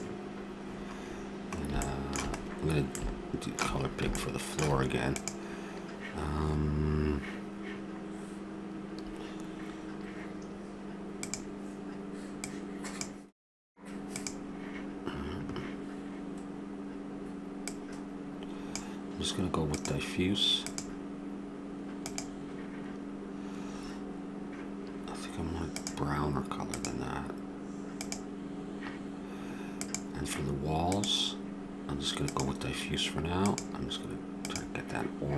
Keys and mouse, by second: 25.7-28.1 drag, 29.8-34.0 drag.